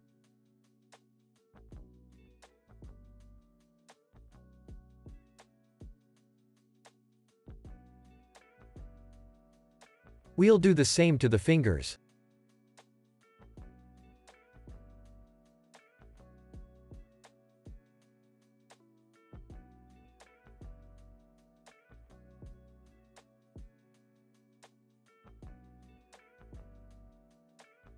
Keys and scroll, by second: 2.5 space, 13.4 u, 14.2 super+v.